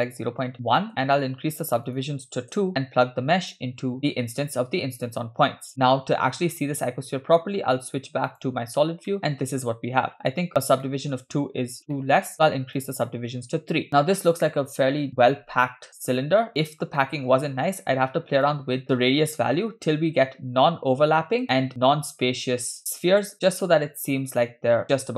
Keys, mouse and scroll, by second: 0.5 BackSpace, 1.9 click, 3.5-5.1 drag, 5.7 scroll up 2, 8.4 click, 9.1 shift+middle drag, 9.5 scroll up 3, 10.9 shift+middle drag, 11.9-12.3 middle drag, 12.8 click, 13.9-16.2 middle drag, 13.9 scroll down 3, 16.5 scroll up 3, 17.1 shift+middle click, 18.5-24.8 shift+drag.